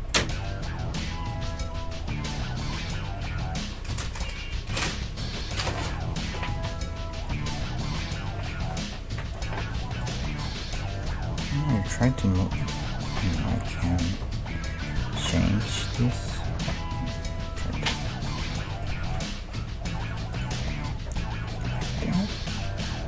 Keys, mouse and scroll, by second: 0.3 g, 1.8 middle click, 3.3 g, 5.6 KP_3, 6.5-8.3 middle drag, 7.9-9.8 drag, 7.9-9.3 right drag, 9.8-17.3 middle drag, 11.1 n, 14.2 n, 18.6-19.9 middle drag, 19.9-21.6 drag, 21.6-23.0 middle drag.